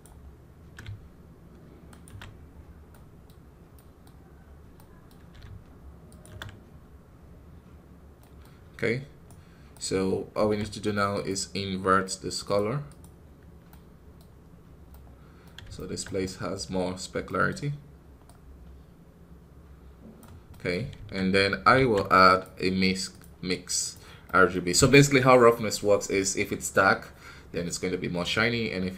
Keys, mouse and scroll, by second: 2.4-2.8 scroll up 1, 2.8 middle click, 3.3 scroll up 1, 3.6 middle click, 4.2-4.6 scroll down 3, 4.6-6.0 middle drag, 6.0-7.0 ctrl+shift+drag, 7.0 scroll up 2, 8.1-9.1 middle drag, 9.1-12.8 right drag, 12.8 shift+a, 13.5 middle click, 14.3-14.8 scroll up 1, 14.8-16.5 middle drag, 16.5-17.2 scroll up 1, 18.2-23.7 drag, 23.7 shift+a, 25.3-28.9 middle drag.